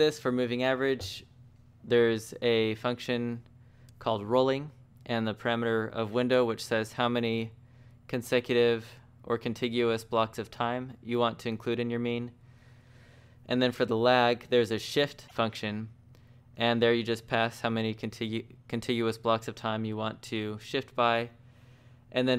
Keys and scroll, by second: 8.3 j, 12.8 j, 13.3 shift+v, 20.5-22.0 typing.